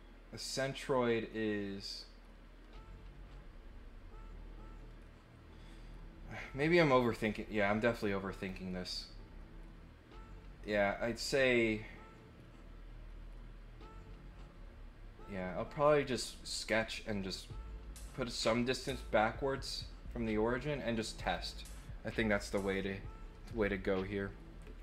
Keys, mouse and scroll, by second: 7.1 click, 8.3 click, 19.7 click, 21.2 click.